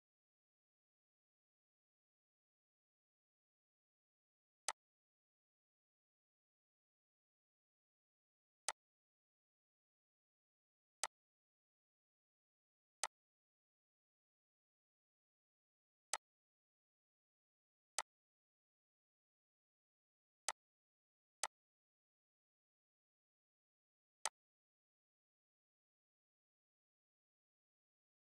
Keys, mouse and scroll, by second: 1.4-1.9 scroll, 4.6 click, 8.6-11.0 drag, 16.0 click, 23.3 right click, 24.2 click.